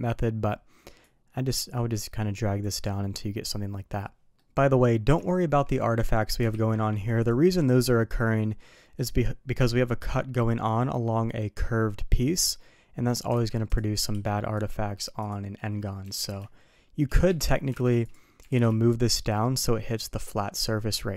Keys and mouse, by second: 0.9-2.5 drag, 2.9 middle drag, 4.3 middle drag, 5.2 shift+middle drag, 6.4 alt+v, 8.2 middle click, 8.9 middle click, 13.5 alt+v, 17.8 alt+v, 18.3 g.